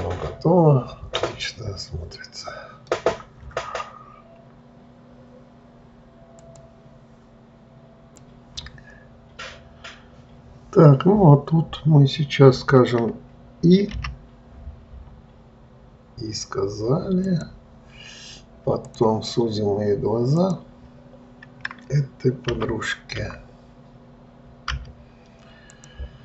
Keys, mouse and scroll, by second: 19.2 click, 20.7 click, 22.8 t.